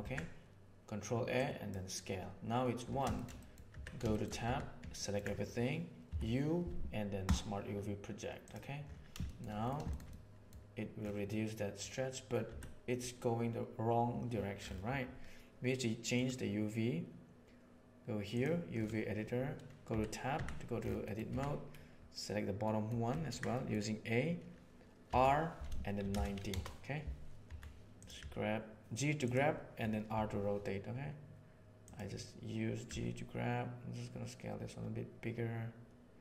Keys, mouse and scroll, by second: 3.1 shift+middle click, 3.3 middle click, 3.6 Tab, 4.0 shift+middle click, 4.4 a, 4.9 ctrl+middle click, 6.0 u, 9.2 shift+middle click, 9.8 shift+middle click, 10.0 middle click, 11.2 middle click, 12.4 Tab, 16.1-18.3 drag, 19.8 Tab, 20.3 a, 21.0 middle drag, 21.2 a, 22.7 middle click, 23.2 ctrl+middle click, 23.6 middle click, 25.0 r, 27.4 g, 28.1 s, 30.0 g, 32.8 s.